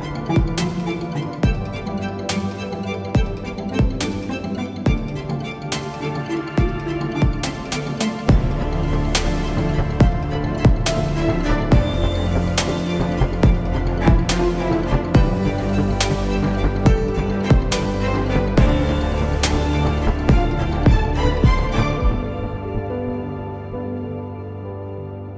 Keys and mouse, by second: 4.1 Tab, 5.1 ctrl+r, 11.6 ctrl+Tab, 13.1 z, 13.4 c, 14.0-15.6 drag, 14.5 x, 17.1-20.5 right drag, 20.5 ctrl+r, 22.1 ctrl+z, 22.8 ctrl+z, 24.6 ctrl+r.